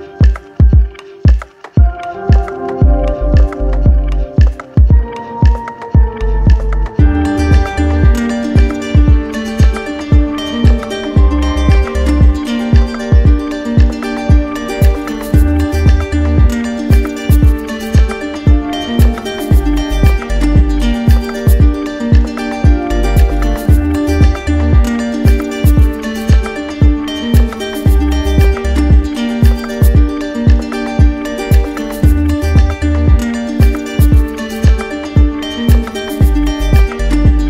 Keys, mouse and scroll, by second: 0.0-0.6 typing, 0.6 alt+click, 2.1 z, 2.9-4.0 drag, 6.7 right click, 7.8 click, 8.7 click, 9.7 d, 11.8 alt+click, 13.0 alt+click, 14.2 alt+click, 15.3 alt+click, 16.3 alt+click, 17.5 alt+click, 18.6 alt+click, 19.3 click, 20.3 alt+click, 21.2 alt+click, 22.2 click, 23.3 alt+click, 24.3 alt+click, 25.0 alt+click, 25.7 click, 27.2 alt+click, 28.0 alt+click, 28.9 click, 29.5 alt+click, 30.9 alt+click, 32.0 alt+click, 32.7 alt+click, 33.5 alt+click, 34.6 alt+click, 35.3 alt+click, 35.6 click, 36.7 alt+click.